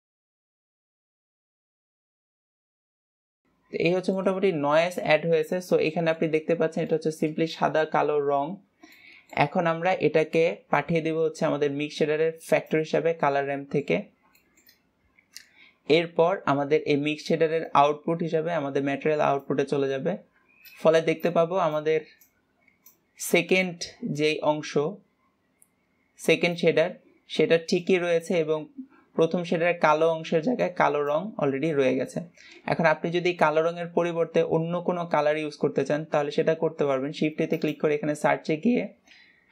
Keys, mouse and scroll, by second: 0.1 click, 0.5-1.5 drag, 1.8 click, 3.4-3.9 scroll down 3, 4.2-5.8 shift+middle drag, 5.8 scroll up 6, 6.2 shift+middle click, 6.9 scroll down 3, 7.2-9.0 shift+middle drag, 9.0 scroll down 2, 9.2-11.0 shift+middle drag, 11.0-14.0 drag, 14.0 shift+middle click, 14.5-14.9 scroll down 1, 14.9-18.0 shift+middle drag, 18.0 click, 21.4-22.0 shift+drag, 22.6 click, 32.4 scroll down 2.